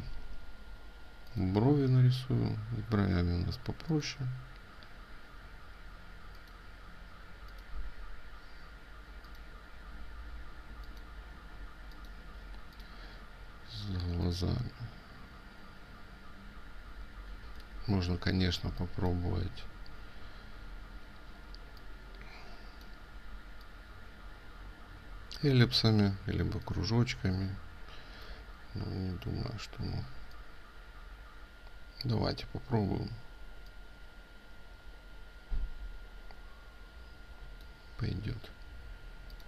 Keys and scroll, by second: 17.4 ctrl+z.